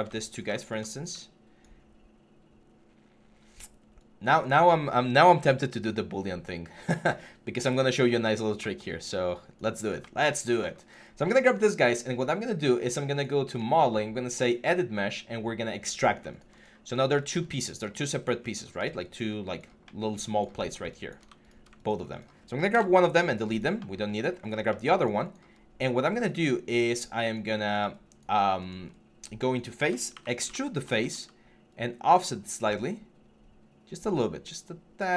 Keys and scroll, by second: 22.5 BackSpace, 29.9 ctrl+e.